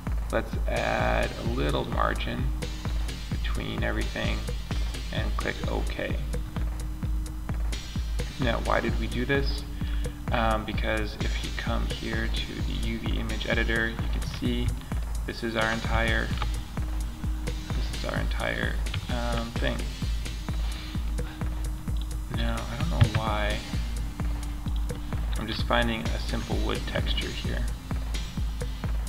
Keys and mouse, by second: 6.0-7.2 middle drag, 10.5-12.4 drag, 12.8-13.5 drag, 13.5-18.0 middle drag.